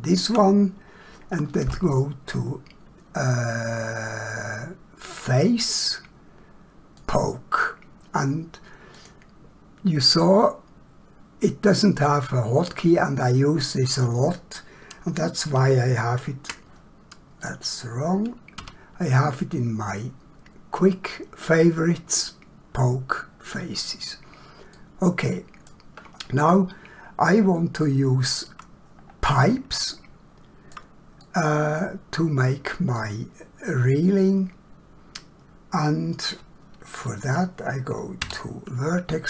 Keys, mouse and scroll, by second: 5.2 click, 15.5 ctrl+q, 17.4 click, 18.6 q, 24.8 middle click, 26.3 scroll down 1, 27.9 shift+middle click, 29.0 scroll up 1, 29.9 shift+middle click, 31.2 middle click, 38.2 1.